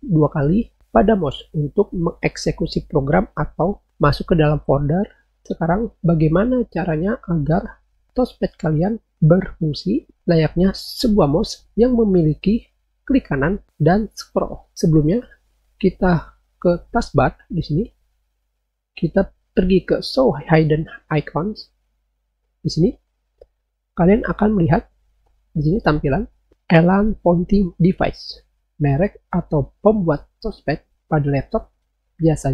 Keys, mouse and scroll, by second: 21.2 click.